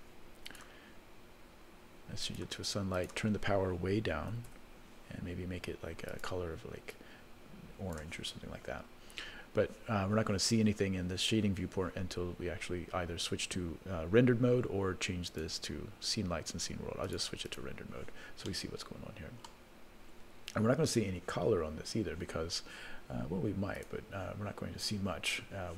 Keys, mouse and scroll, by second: 0.5 click, 2.2 click, 2.9-4.7 drag, 6.1 click, 15.3-17.2 drag, 17.7 click, 18.5-19.5 middle drag, 19.9 scroll up 2, 20.4-21.5 scroll down 2, 21.5 scroll down 1, 23.7 click.